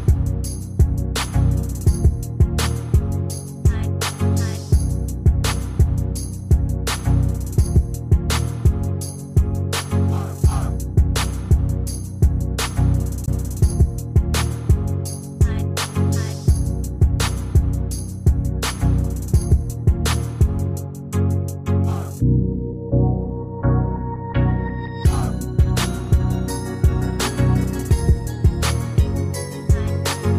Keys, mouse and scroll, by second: 1.0-1.7 ctrl+scroll down 1, 5.4-6.2 ctrl+scroll down 1, 6.8 shift+click.